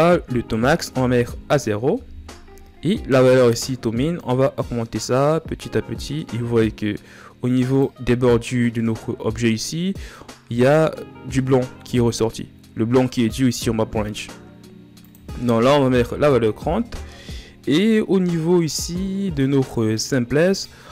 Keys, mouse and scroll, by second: 1.1-2.6 drag, 2.6-3.8 scroll up 1, 3.8 scroll up 1, 4.0-7.5 drag, 8.5-9.1 scroll up 5, 16.0-17.8 drag, 17.8 scroll down 5, 18.1-18.6 middle drag, 18.6 scroll up 4.